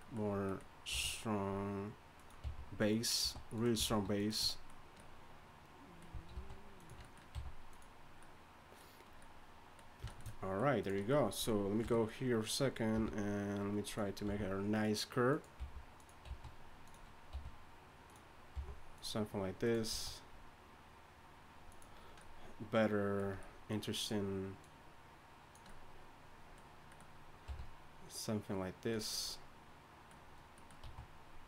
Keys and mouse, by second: 0.9 r, 2.4 g, 3.2 s, 3.8 alt+s, 6.3 alt+s, 7.3 g, 10.8-11.8 right drag, 11.8 KP_3, 12.9 r, 14.2 g, 15.6 g, 16.3 s, 17.3 r, 18.5 g, 19.9 s, 23.9-27.5 right drag, 25.5 click, 27.5 r, 29.7 click, 30.8 s.